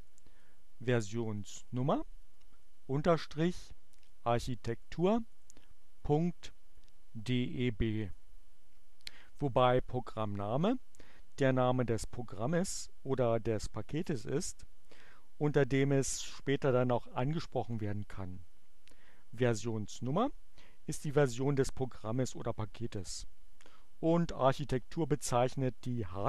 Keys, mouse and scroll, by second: 1.9 click, 2.7 click, 3.4 click, 3.6-5.1 drag, 5.4 click, 5.8 click, 6.4-7.7 drag.